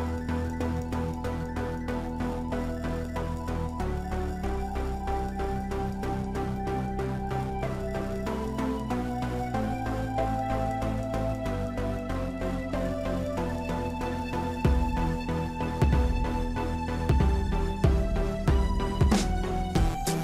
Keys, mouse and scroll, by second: 1.8 i, 2.6-3.6 scroll down 1, 3.6-5.8 shift+middle drag, 5.8-8.6 drag, 10.7-11.0 scroll down 1, 11.0-19.8 middle drag, 19.8 scroll down 1, 20.0-20.2 middle drag.